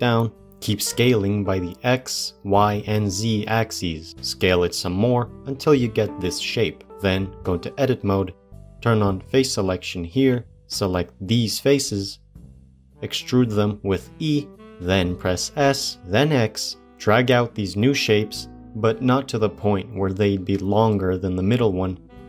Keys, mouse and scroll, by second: 0.3 scroll up 4, 0.4 s, 2.5-3.6 scroll up 3, 3.6 s, 4.1-7.3 shift+middle drag, 7.3 Tab, 7.7 shift+middle click, 8.6 shift+middle click, 10.7 middle click, 10.7 click, 11.7 middle click, 12.7 shift+click, 13.0 middle click, 13.1 e.